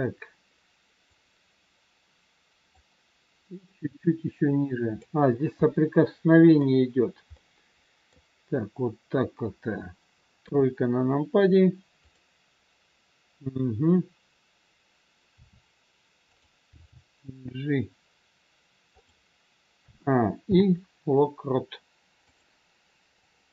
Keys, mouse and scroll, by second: 1.1 click, 3.9 click, 5.2-5.7 scroll down 2, 5.7 middle click, 8.2 middle click, 10.4 KP_3, 12.0 click, 15.3 r, 16.7 g, 19.7 a, 20.4 i, 23.2 click.